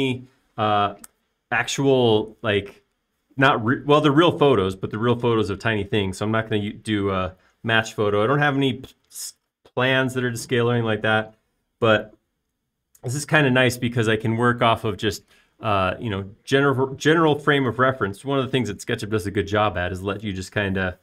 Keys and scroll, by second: 0.8 typing, 2.4 BackSpace.